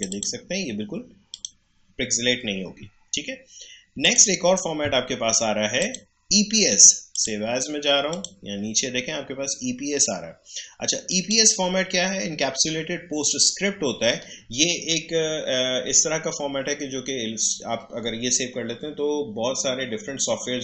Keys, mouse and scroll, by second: 4.0 click, 11.0 click.